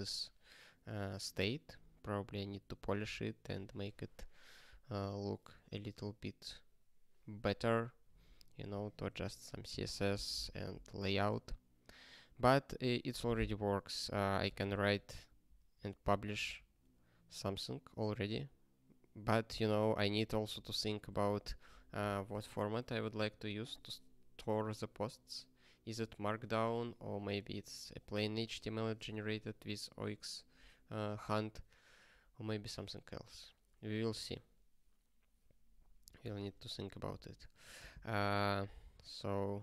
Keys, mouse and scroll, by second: 9.1 ctrl+g, 15.6 ctrl+space, 15.7 ctrl+n, 16.0 ctrl+n, 16.3 ctrl+p, 20.4 ctrl+space, 20.6 ctrl+p, 36.3 ctrl+space, 36.4 ctrl+e, 37.1 ctrl+g, 37.6 ctrl+n, 37.7 ctrl+n, 38.5 Return, 38.7 ctrl+p, 39.0-39.6 typing.